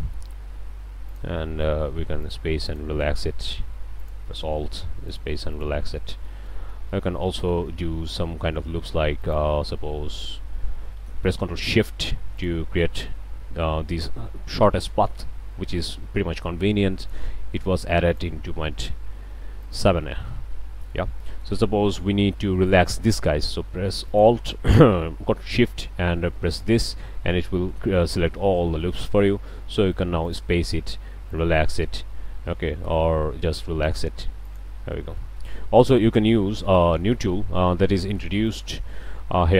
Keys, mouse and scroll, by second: 2.3 click, 2.7 click, 4.0 alt+drag, 5.1 click, 5.5 click, 11.1-11.4 ctrl+middle drag, 12.4 ctrl+shift+drag, 15.3 e, 17.0 click, 17.3 e, 18.1 click, 18.3 e, 19.6 alt+drag, 19.9 alt+a, 20.0-21.0 alt+drag, 21.3-21.6 drag, 24.1 drag, 26.5 ctrl+shift+click, 27.8-28.3 drag, 28.7 click, 30.3 click, 31.3 drag, 32.5 ctrl+z, 33.8 click, 34.4 click, 34.9-35.5 drag, 35.3 ctrl+z, 35.8 ctrl+click, 37.1 ctrl+z, 38.0-38.3 ctrl+drag, 38.4 click.